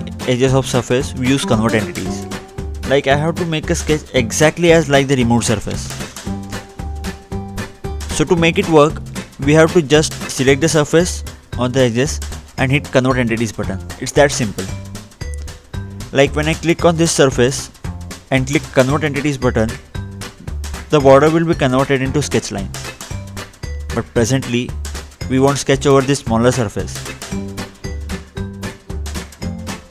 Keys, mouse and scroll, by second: 0.1 click, 1.2-1.5 scroll up 2, 1.6 middle click, 2.6-3.0 scroll down 2, 3.0 click, 4.0-4.4 scroll up 2, 4.4 click, 4.8 click, 6.0 Delete, 7.8 ctrl+8, 8.4-8.8 scroll down 2, 10.2 click, 12.2-13.4 scroll down 1, 13.5 click, 14.6 scroll up 2, 14.9-15.5 scroll down 2, 15.6 click, 16.0-17.2 scroll up 1, 17.2-17.6 scroll up 1, 17.9 click, 18.5 scroll up 2, 18.7-19.0 scroll down 2, 19.0-19.9 scroll up 2, 19.9 scroll down 2, 20.1 scroll up 2, 20.4 scroll down 2, 20.6 scroll up 2, 20.8 scroll down 2, 21.1-21.6 scroll up 2, 21.6-22.4 scroll down 2, 22.4-22.8 scroll up 2, 23.6 ctrl+z, 24.0-24.4 scroll up 2, 24.4-26.4 scroll down 2, 26.4 click, 26.8 scroll up 2, 26.9-27.6 scroll down 2, 27.6 click, 28.2 middle click, 29.7 click.